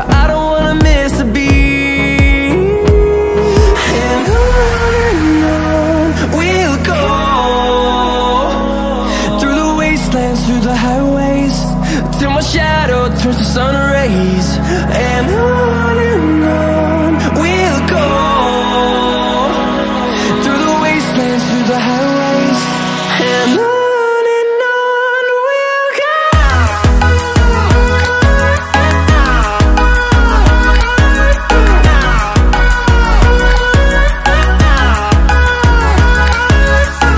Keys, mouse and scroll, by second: 4.7 click, 14.5 click, 16.4 click, 22.7 right click, 23.6 click, 29.3 click, 34.2 click.